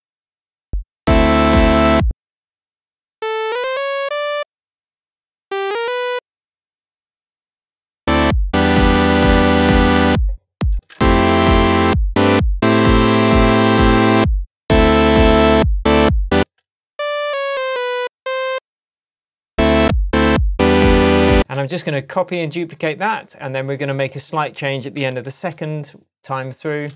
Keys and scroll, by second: 2.0 space, 10.7 space, 16.3 space, 21.3 space, 25.0 super+d.